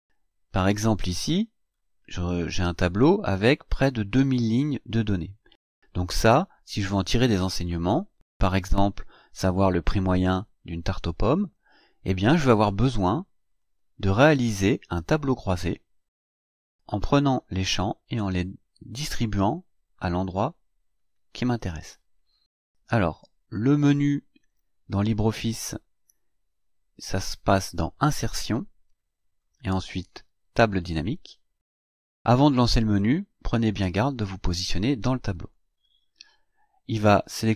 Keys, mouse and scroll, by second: 2.6 click, 13.5 click, 23.6 click, 27.9 click, 35.4 click.